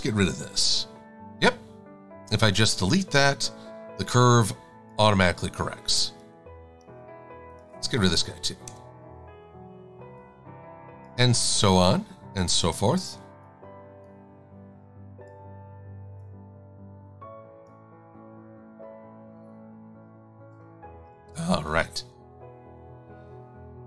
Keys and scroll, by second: 0.7 Delete, 8.7 Delete, 21.4 a.